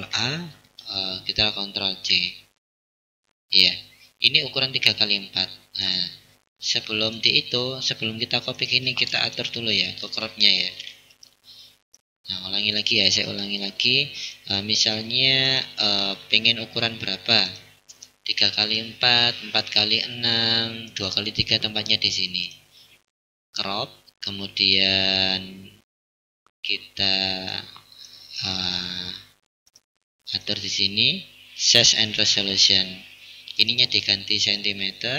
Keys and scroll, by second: 2.2 ctrl+c.